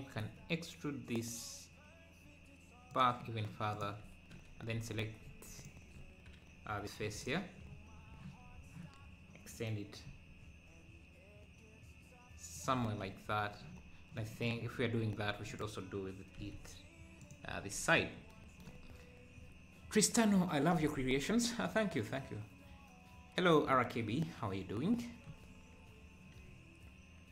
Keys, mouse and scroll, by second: 0.2 e, 3.7 click, 5.6-7.1 drag, 7.1 3, 7.2 click, 7.7 scroll down 2, 8.5 scroll up 2, 10.1 e, 12.8 Tab, 13.8 scroll down 2, 14.9 scroll up 2, 15.1 Tab, 15.5 click, 16.4 e, 17.5 Tab.